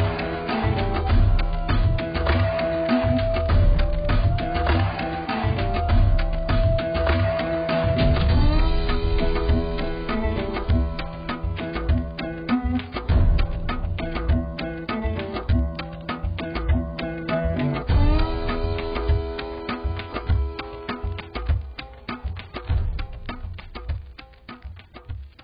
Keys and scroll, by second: 10.3 x, 23.3 ctrl+0.